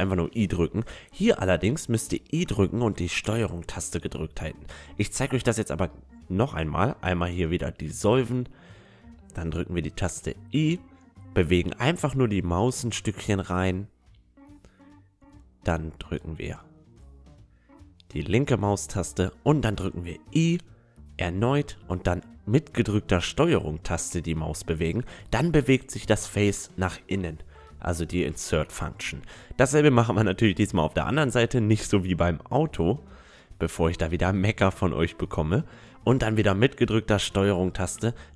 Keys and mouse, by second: 2.5 Tab, 3.0-4.9 middle drag, 3.3 a, 4.9 Tab, 5.9-7.4 drag, 7.4 right click, 7.4 x, 9.9 i, 21.3 i, 24.3 Tab, 24.6 click, 24.8-26.1 middle drag, 26.9 Tab, 27.7-29.2 drag, 28.5 x, 29.2 right click, 30.0 i, 34.3 i, 37.6 Tab, 37.8-38.3 middle drag.